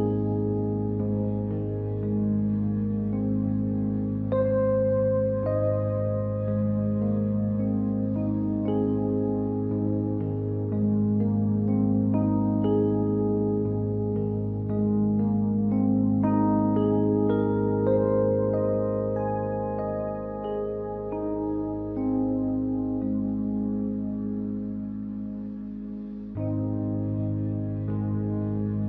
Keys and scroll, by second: 25.0 ctrl+z.